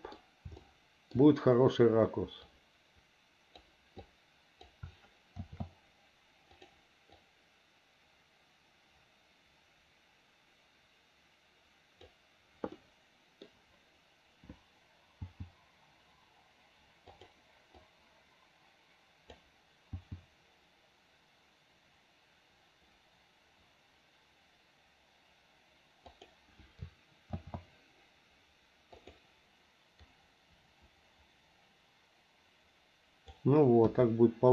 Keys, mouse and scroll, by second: 0.6 shift+middle click, 2.5-3.7 drag, 4.0 click, 5.4 shift+d, 7.2-12.1 drag, 12.8 middle click, 15.2 g, 17.8-19.4 drag, 19.9 g, 27.4 shift+d, 29.4-33.3 drag, 33.8 KP_1.